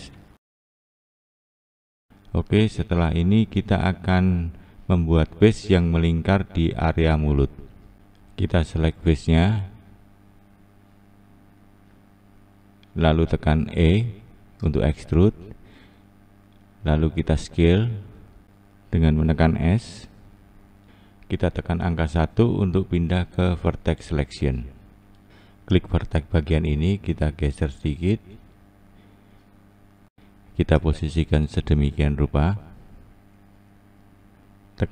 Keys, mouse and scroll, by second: 7.0 2, 8.2 click, 10.2 shift+click, 11.2 shift+click, 12.4 shift+click, 13.6 e, 17.0 s, 23.4 1, 25.0 Left, 25.8 Left, 28.2 Left, 34.3 Left, 34.3-34.9 scroll up 3.